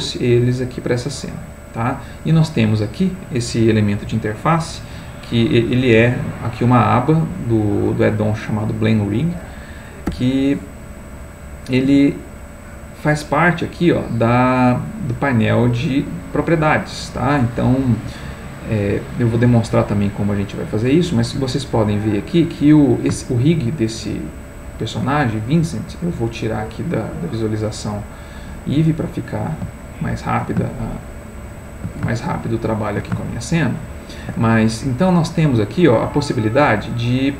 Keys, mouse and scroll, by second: 10.1 n, 12.2 n, 15.0 middle click, 23.5-25.1 shift+middle drag, 26.7-27.8 drag, 28.4-33.2 middle drag.